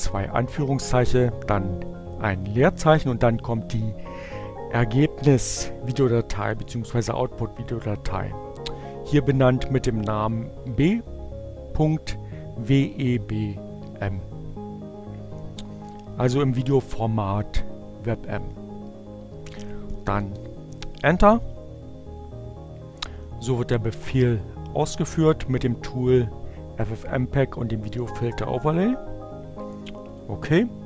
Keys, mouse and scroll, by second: 19.0 Return.